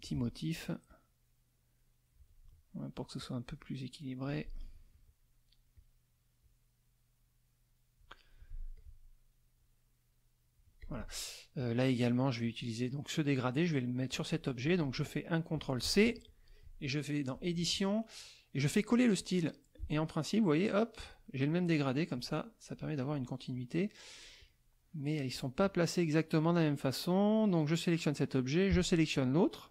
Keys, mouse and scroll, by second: 0.1 click, 0.9-2.4 drag, 3.2-4.4 drag, 4.9 click, 5.8 click, 6.4-8.2 drag, 8.8 click, 9.6-10.8 drag, 10.8 click, 11.6 click, 12.5 click, 14.1 click, 14.7 click, 15.9 ctrl+c, 16.3 ctrl+click, 17.3 click, 19.2 click, 21.5 click, 22.7 click, 24.4 click, 25.6 click, 29.1 shift+click.